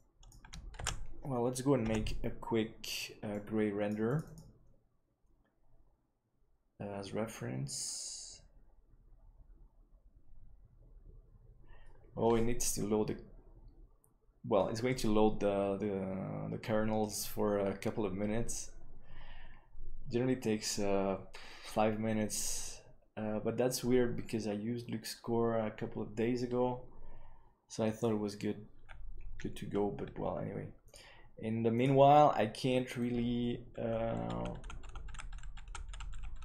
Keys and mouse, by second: 0.9 ctrl+s, 3.1 F12.